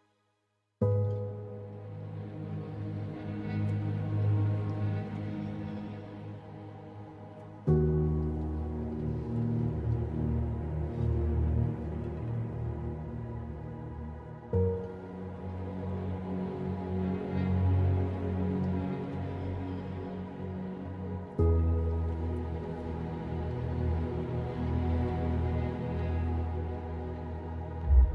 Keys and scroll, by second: 5.5 Return, 16.6 ctrl+alt+g.